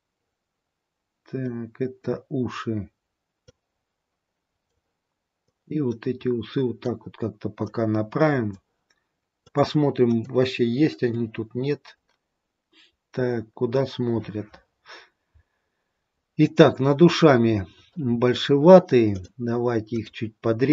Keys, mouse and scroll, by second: 1.5 middle click, 3.6 click, 5.6 click, 9.5 click, 11.2 middle click, 15.3-16.5 scroll up 2, 16.5-18.5 scroll down 2, 19.1 click.